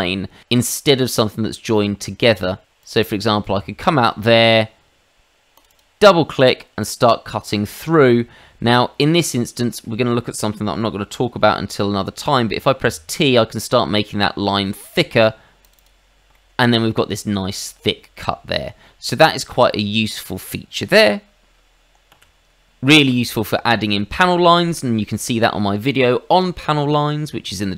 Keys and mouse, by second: 0.6 click, 2.8 click, 5.5 click, 5.6 click, 6.0 middle click, 8.6 middle click, 12.2 t, 15.6 click, 15.8 click, 16.3 middle click, 19.3 click, 20.2 shift+middle click, 22.1 ctrl+z, 24.6 shift+middle click.